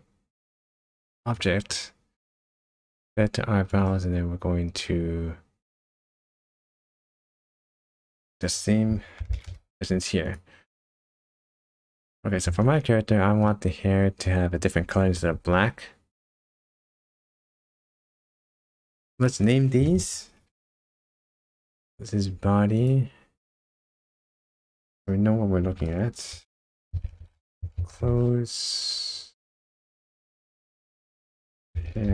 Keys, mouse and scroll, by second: 1.3 click, 3.7 click, 6.7 click, 8.3 click, 10.2 click, 11.2 scroll up 1, 11.3-12.4 scroll down 6, 12.6 shift+middle click, 13.5-14.1 scroll up 3, 14.2 shift+middle click, 14.9 scroll up 1, 17.0 click, 18.5 click, 18.8 click, 23.8 click, 24.0 click, 29.8 click, 30.0 click.